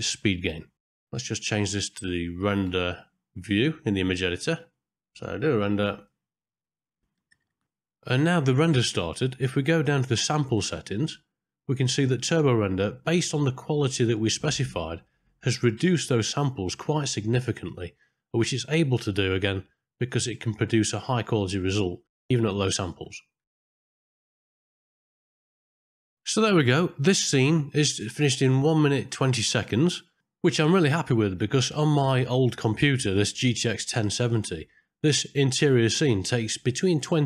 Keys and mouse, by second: 0.7 click, 3.6 click, 4.2 middle click, 6.0 click.